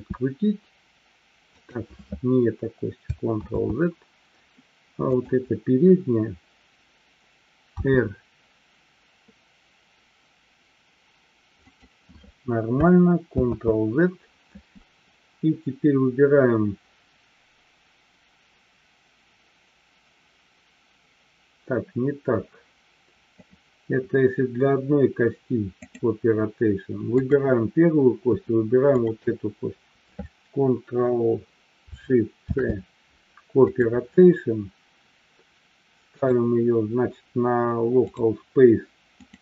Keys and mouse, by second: 3.8 ctrl+z, 5.1-5.8 drag, 13.8 ctrl+z, 23.3 click, 25.8 click, 27.2 click, 28.8-29.6 shift+drag, 32.3 ctrl+shift+c, 36.2-38.6 drag, 39.2-39.4 drag.